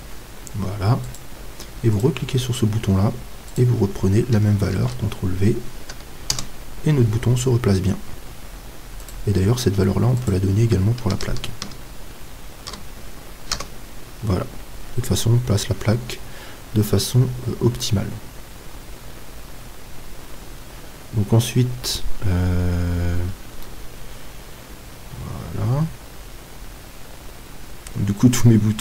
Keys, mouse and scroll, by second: 2.0-3.8 right drag, 3.5-9.0 drag, 9.0-12.0 right drag, 10.2-23.2 drag, 23.2 middle click, 23.2 z, 23.8-25.5 middle drag.